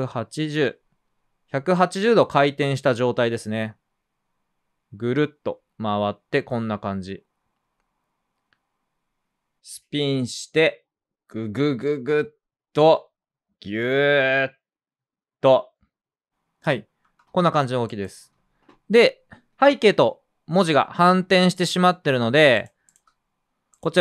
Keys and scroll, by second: 0.0-0.1 typing, 4.7 typing, 10.4 space, 17.0 space, 21.3 space, 22.0 space.